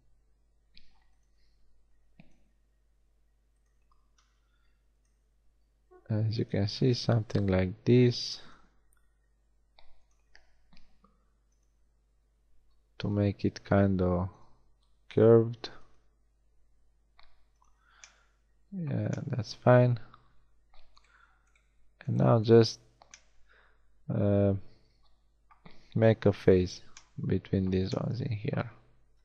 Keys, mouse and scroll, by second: 1.3 e, 2.4 e, 3.7 e, 5.2 e, 6.6 e, 8.6 e, 10.2 e, 11.7 e, 13.2 e, 14.5 e, 16.1 e, 21.0-24.4 middle drag, 26.2 f, 29.1 KP_1.